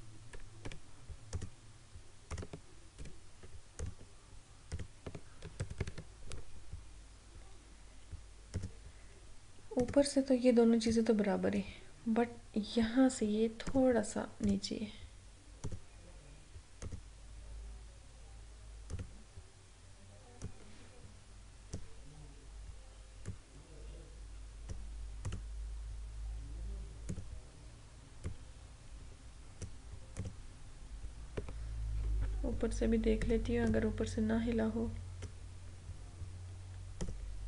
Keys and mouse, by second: 0.7 Up, 1.4 click, 3.1 Down, 3.9 click, 5.7 ctrl+=, 8.7-30.2 drag, 33.2-37.0 drag.